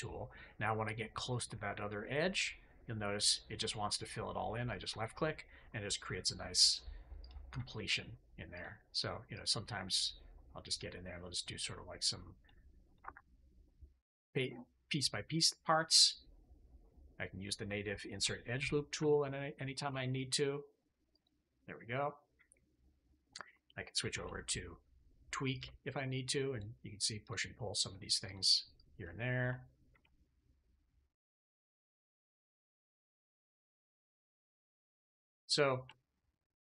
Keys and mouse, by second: 5.6 middle click, 7.1 click, 7.8 ctrl+click, 8.4 ctrl+click, 9.2 ctrl+click, 9.8 ctrl+click, 10.5 ctrl+click, 11.3 ctrl+click, 12.3 ctrl+click, 12.8 ctrl+click, 13.9 middle click, 18.9 ctrl+r, 19.4-19.7 ctrl+r, 19.5 ctrl+click, 22.0 click, 24.0 alt+q, 26.8 click, 27.8 click, 29.3 a, 29.8 alt+a, 30.3 click, 32.1 click, 32.2 right click, 32.9 shift+middle click, 33.1 click, 33.1 right click, 33.7 shift+click, 33.7 shift+right click, 33.9 click, 33.9 right click, 34.5 shift+click, 34.9 click, 35.8 shift+click, 36.2 click.